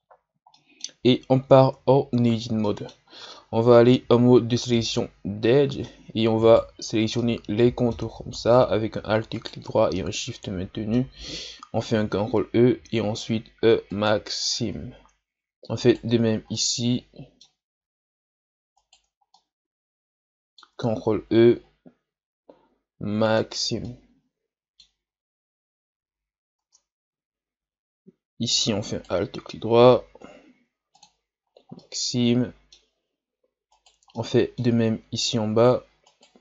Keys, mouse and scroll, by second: 0.5-1.6 middle drag, 1.6 Tab, 2.2 ctrl+scroll up 2, 2.6 middle click, 3.0 scroll up 1, 3.7 ctrl+Tab, 6.5 alt+right click, 7.2 middle click, 8.1-9.4 scroll up 1, 9.4 alt+shift+right click, 9.9-11.9 middle drag, 11.9 ctrl+e, 14.9 scroll down 2, 15.8 alt+right click, 16.5-18.8 middle drag, 18.8 alt+shift+right click, 19.4-21.1 middle drag, 21.1 ctrl+e, 23.8-25.1 middle drag, 25.1-25.9 scroll up 1, 26.1 Tab, 26.6 Tab, 28.9 alt+right click, 30.2 ctrl+e, 31.5 scroll down 1, 31.8-33.7 middle drag, 33.7 alt+right click, 34.2 middle click, 34.9-36.1 scroll up 1, 36.1 alt+shift+right click.